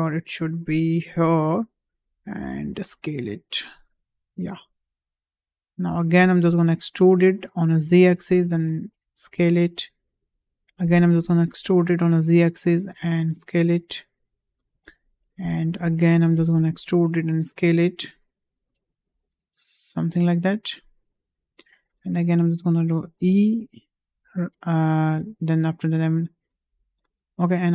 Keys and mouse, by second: 1.9 d, 2.8 s, 6.2 e, 8.2 s, 11.0 e, 16.3 e, 19.0 s, 23.1 e, 27.2 ctrl+z.